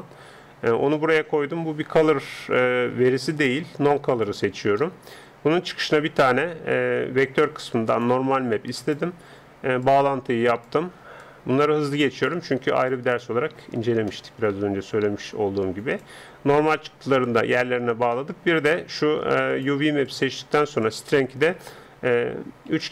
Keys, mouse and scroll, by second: 0.0-1.9 drag, 1.7-3.3 middle drag, 3.3-5.9 drag, 5.9 shift+a, 9.9-14.3 drag, 14.3-16.0 middle drag, 15.3-22.9 drag, 19.5 middle click.